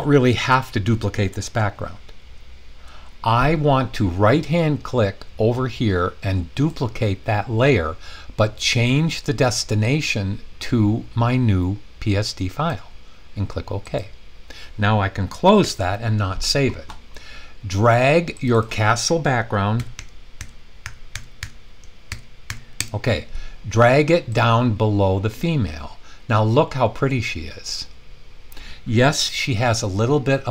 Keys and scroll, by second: 15.6 super+w, 19.5-22.4 typing, 22.8 Return.